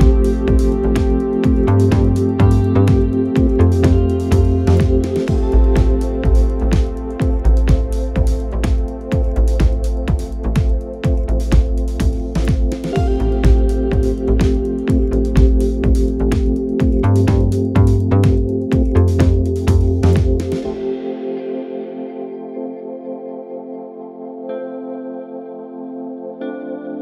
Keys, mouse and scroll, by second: 1.7-2.4 scroll up 1, 2.4-4.0 scroll up 1, 4.0-6.1 scroll up 1, 6.1-6.6 scroll down 4, 6.7-11.3 drag, 13.4-16.6 scroll up 4, 16.6-19.5 scroll up 1, 19.5 scroll up 1, 19.8-27.0 drag.